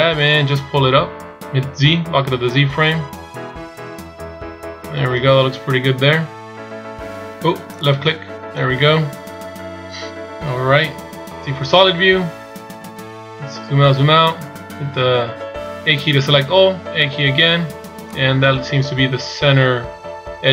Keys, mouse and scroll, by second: 0.0 g, 9.6-11.7 scroll down 1, 11.7 z, 12.3-12.9 scroll down 5, 13.7-14.2 scroll down 2, 14.2 z, 16.0 a, 17.0 a, 18.5 click.